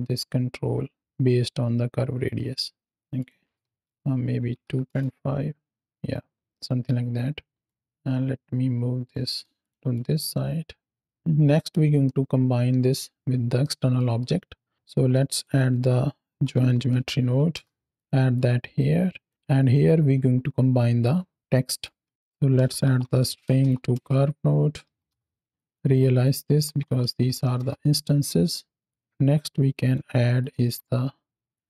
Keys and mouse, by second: 3.0-4.9 drag, 6.7 click, 7.8-9.0 drag, 9.5 shift+click, 9.8-11.2 drag, 11.9-12.8 middle drag, 13.5 middle click, 14.8 shift+a, 17.9-19.2 drag, 19.3-20.9 drag, 21.5 middle click, 22.0 shift+a, 25.5 click, 25.9 drag, 28.7 click, 29.0 click, 30.2 click, 30.7 shift+d, 31.4 click.